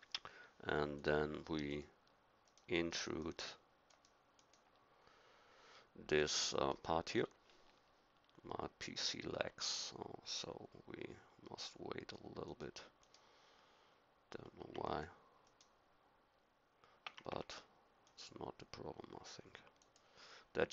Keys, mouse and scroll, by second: 0.9-4.2 drag.